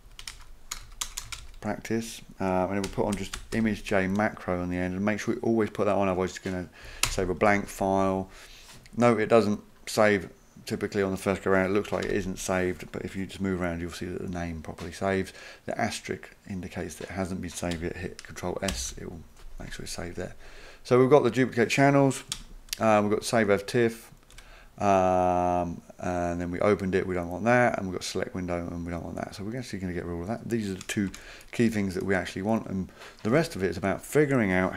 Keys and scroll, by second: 0.0-4.0 typing, 7.0 Return, 12.0 Return, 18.7 ctrl+s, 22.3 Return, 24.3 Return, 31.1 Delete, 31.7 BackSpace, 33.3 BackSpace.